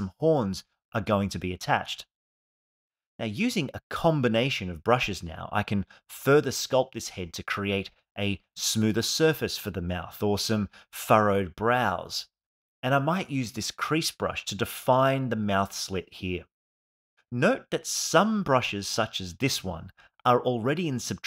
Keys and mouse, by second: 3.7 click, 3.9 click, 6.4 alt+middle click, 6.6 click, 7.0 click, 8.7 ctrl+shift+z, 8.9-9.4 shift+f, 9.4 shift+click, 10.3 click, 11.2 click, 12.4 click, 14.1 click, 15.1 click, 17.0 alt+middle click, 18.0 ctrl+z, 18.2 shift+f, 18.4 click, 19.6 alt+middle click, 20.4 click, 20.8 f.